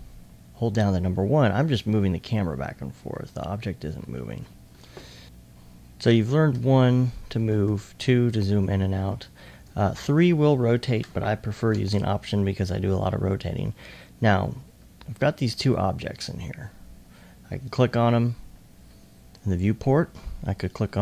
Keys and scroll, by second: 6.3 typing, 7.5-8.4 typing, 11.4-12.2 typing.